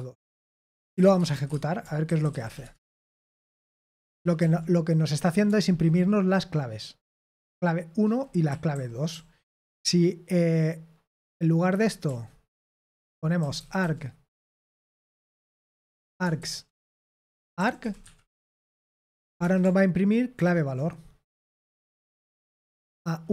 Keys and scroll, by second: 1.2-3.8 typing, 4.1 ctrl+p, 4.5 ctrl+p, 5.4 Return, 7.8-8.6 typing, 9.8-10.9 typing, 12.4-14.3 typing, 16.1-19.9 typing, 20.3 ctrl+p, 21.7 ctrl+p, 22.1 Return.